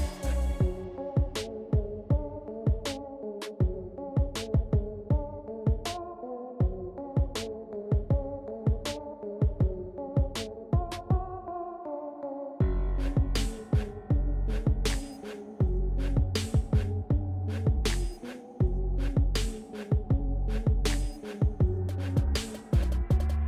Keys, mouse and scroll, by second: 0.5 ctrl+z, 2.0 ctrl+z, 6.4 click, 10.3-13.3 drag, 16.0-16.4 scroll up 1, 18.2 click, 20.8-23.4 drag.